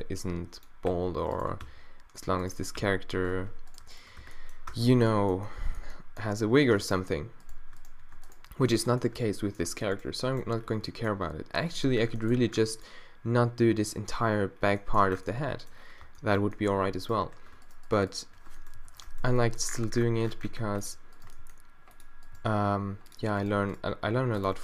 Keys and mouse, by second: 0.9 q, 1.6 q, 2.8 q, 3.4 z, 4.2 q, 4.7 Tab, 6.8 Tab, 9.3 click, 10.3 click, 15.1 Tab, 16.0 Tab, 18.8 o, 19.4 g, 21.2 g, 22.4 g, 23.8 g.